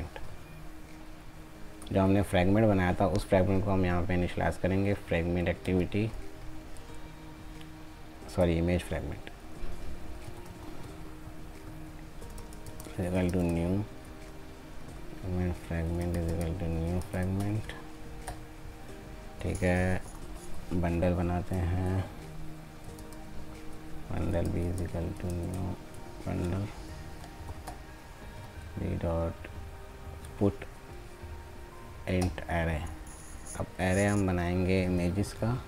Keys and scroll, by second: 13.3 ctrl+space, 17.1 ctrl+space, 25.4 ctrl+space.